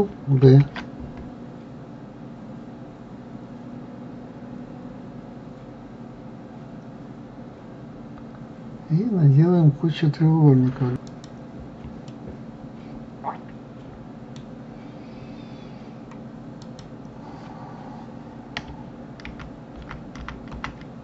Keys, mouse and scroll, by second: 0.9 ctrl+b, 12.5-15.5 middle drag, 17.0 click, 19.7 ctrl+z, 20.2 ctrl+z, 20.6 ctrl+z.